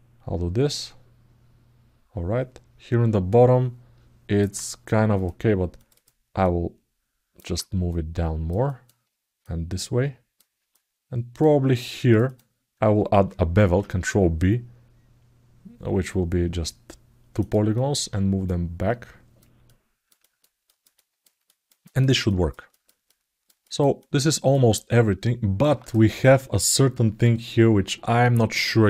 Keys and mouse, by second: 5.6 click, 6.2 alt+middle click, 7.7 click, 8.4 alt+middle click, 9.2 click, 10.5 alt+middle click, 12.0 click, 17.6 alt+middle click, 18.3 click, 19.5 alt+middle click, 20.4 alt+middle click, 20.7 ctrl+alt+middle click, 21.2 alt+middle click, 21.6 ctrl+alt+middle click, 22.0 alt+middle click, 22.5 alt+shift+middle click, 22.8 alt+middle click, 23.4 ctrl+alt+middle click, 23.8 alt+middle click.